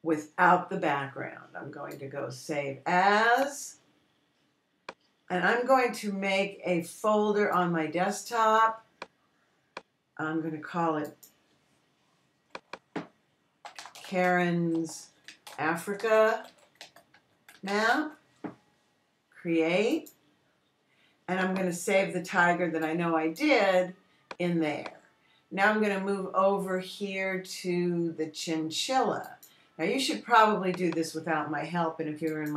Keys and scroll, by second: 14.9-19.9 typing.